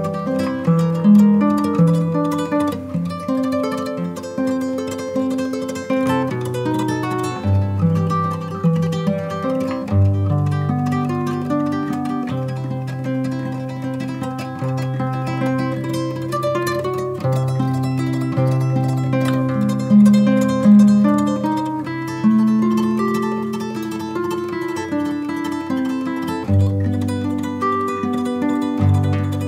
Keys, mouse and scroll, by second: 4.9 click, 8.7 Delete, 8.7 shift+a, 9.8 g, 10.3 z, 11.0 click, 11.9-13.7 drag, 15.3-16.5 scroll down 3, 16.5-20.7 typing, 18.8 click, 21.8 click, 22.1 KP_0, 22.2 KP_1, 22.6 scroll up 1, 23.4 g, 23.7 z, 24.0 click, 24.6 KP_3, 25.1 r, 25.8 click, 26.3 KP_1, 27.2-29.4 drag.